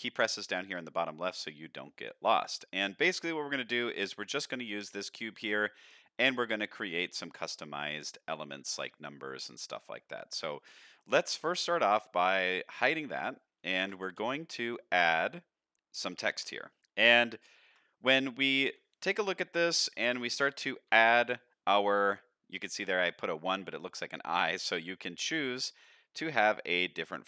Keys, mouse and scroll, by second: 1.4-1.8 middle drag, 2.1 shift+middle click, 2.5-2.8 scroll down 2, 2.8 shift+middle drag, 3.5-3.8 middle drag, 4.0 scroll up 1, 4.1-4.4 scroll down 1, 4.4 click, 4.8 middle drag, 5.6 middle click, 6.6 middle drag, 7.7 middle drag, 8.6-9.1 middle drag, 9.3 middle drag, 10.0 middle drag, 10.6 scroll up 2, 10.9 shift+middle drag, 11.2 middle drag, 12.6 click, 13.2 middle click, 13.7 shift+middle drag, 14.2 shift+a, 16.8 KP_7, 17.0 scroll up 1, 17.4 shift+middle drag, 18.6 Tab, 19.6-20.9 typing, 23.1 Tab, 24.3 click, 25.7 click, 26.2 click, 26.7 click, 27.0-27.2 scroll down 1.